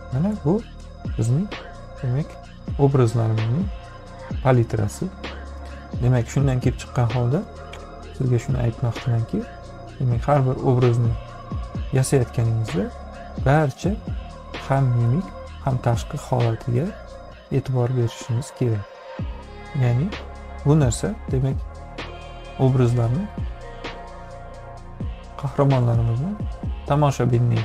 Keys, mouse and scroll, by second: 0.7 click, 0.7 space, 13.6 b, 16.0-17.1 drag, 20.2 click, 21.6-23.0 drag.